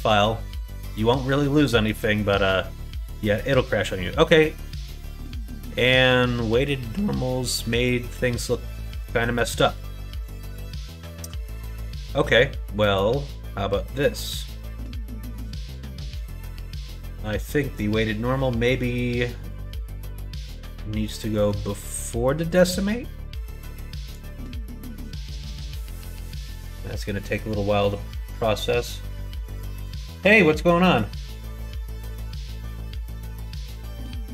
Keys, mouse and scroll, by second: 4.9 middle click, 6.9-8.9 middle drag, 16.9 middle click, 21.4-24.0 drag.